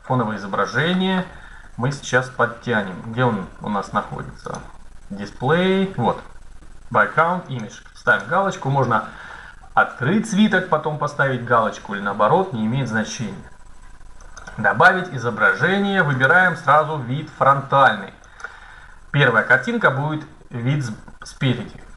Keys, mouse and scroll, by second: 1.6-4.2 middle drag, 4.2-6.0 drag, 7.2-9.7 drag, 13.9-15.8 drag, 16.0-17.7 drag, 21.8 click.